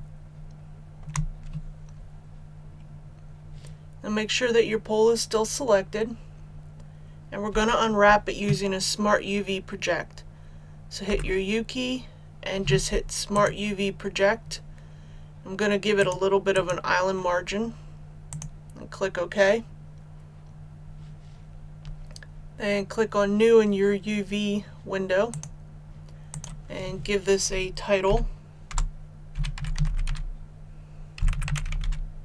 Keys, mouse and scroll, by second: 11.1 u, 13.3 click, 28.0-29.8 typing, 30.9-32.2 typing.